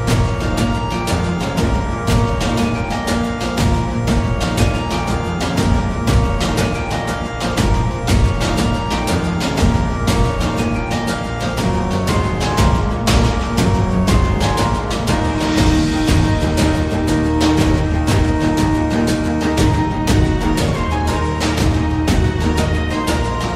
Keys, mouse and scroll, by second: 0.0 a, 0.3 middle click, 1.1 shift+middle click, 3.0 shift+right click, 4.4 shift+a, 7.6 r, 9.2 s, 11.8 shift+Tab, 12.0 shift+middle click, 12.8 click, 13.4-14.6 drag, 14.7 middle click, 15.2 shift+middle click, 15.8 g, 18.4 2, 19.0 ctrl+z, 19.4 Tab, 20.0 click, 20.0 2, 20.5 shift+middle click, 20.9 middle click, 21.3 shift+middle click.